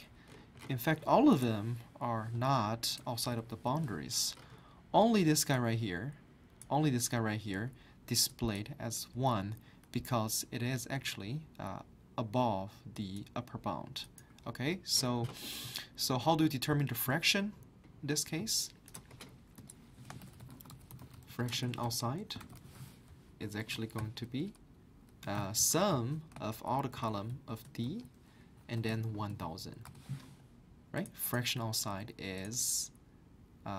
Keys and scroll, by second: 3.5 ctrl+Down, 20.0-23.0 typing, 25.0-29.6 typing, 29.9 Return.